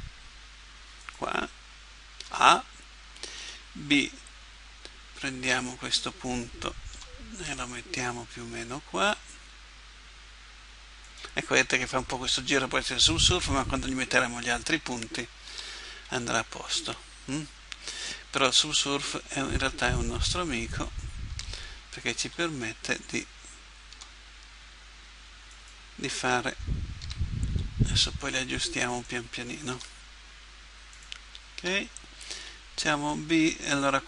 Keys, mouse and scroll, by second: 2.3 a, 3.4 b, 6.9 g, 15.5 a, 16.1 b, 18.4 g, 21.3 a, 22.2 b, 23.9 g, 27.1 a, 27.5 b, 29.7 g, 31.6 a, 32.3 b.